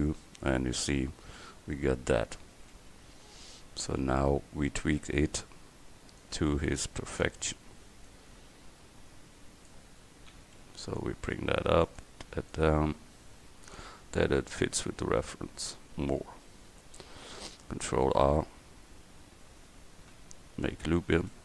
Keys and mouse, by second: 3.5 a, 4.7 c, 7.9-10.4 drag, 10.4 a, 10.7 c, 12.6-16.1 drag, 17.9 ctrl+e, 20.7 ctrl+r.